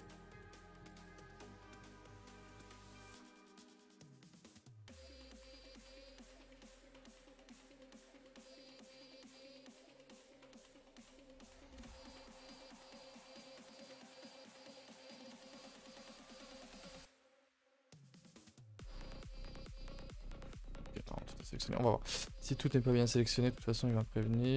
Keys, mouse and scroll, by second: 1.1 alt+shift+click, 1.4 middle click, 2.0 alt+shift+click, 2.4 middle click, 3.2 alt+shift+click, 3.5-4.6 middle drag, 4.6 alt+shift+click, 5.0-5.8 scroll up 4, 5.1 shift+middle click, 6.1 shift+click, 7.1 shift+click, 7.6 shift+click, 8.0-8.3 scroll down 1, 8.3-10.8 shift+middle drag, 10.8 alt+shift+click, 11.6 shift+middle click, 11.8-12.3 scroll up 2, 12.3 shift+middle click, 12.5-13.0 scroll up 1, 13.0 shift+click, 13.7 shift+click, 14.2 scroll down 3, 14.4 shift+middle click, 15.2-15.9 scroll up 4, 15.5 shift+middle click, 16.1 shift+middle click, 16.3-16.9 scroll up 1, 16.9 shift+click, 17.4 shift+click, 17.9 shift+click, 18.3-19.5 scroll down 2, 19.5 scroll down 3, 19.7-21.2 middle drag, 21.2-21.6 scroll down 2, 21.6 ctrl+s, 21.7-23.9 middle drag, 23.9-24.5 drag.